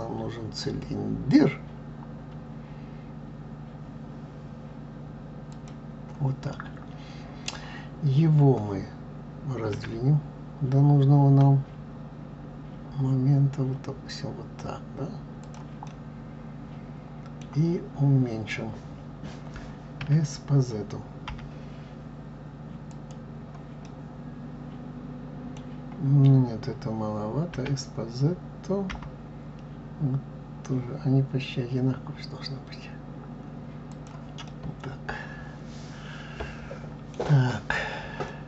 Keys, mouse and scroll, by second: 6.5-9.5 middle drag, 15.9-18.8 middle drag, 23.9-26.8 middle drag, 34.5-37.4 middle drag, 38.3-38.4 middle drag.